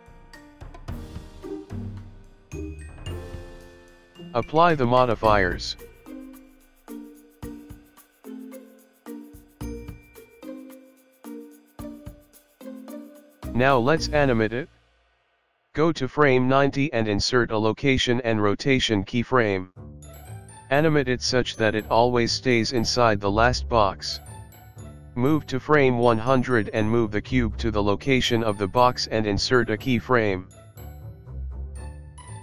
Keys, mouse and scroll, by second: 0.6 click, 2.7 click, 4.8 a, 10.1 Return, 10.1 Tab, 10.1 click, 10.1 KP_2, 10.4 click, 10.8 click, 11.1 middle click, 13.9 click, 15.1 click, 17.1 click, 18.8 i, 23.6 click, 27.4 z, 30.4 g.